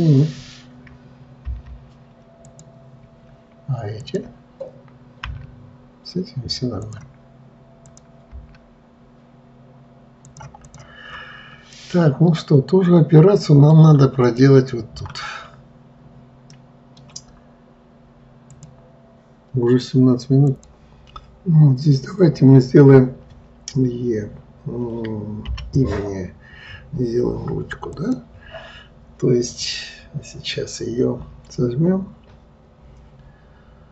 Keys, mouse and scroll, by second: 1.8 m, 4.4 click, 5.6 g, 8.2 click, 8.7 g, 11.0 click, 11.5 scroll down 2, 12.0 scroll down 1, 12.1-14.1 middle drag, 14.1-14.7 scroll down 3, 14.7-19.9 middle drag.